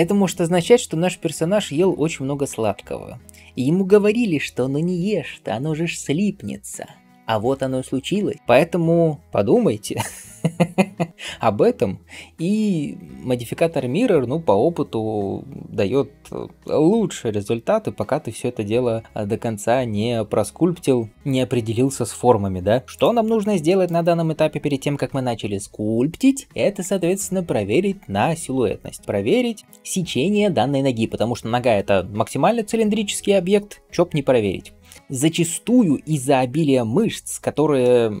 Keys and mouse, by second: 23.7-36.8 middle drag, 37.1-38.2 right drag.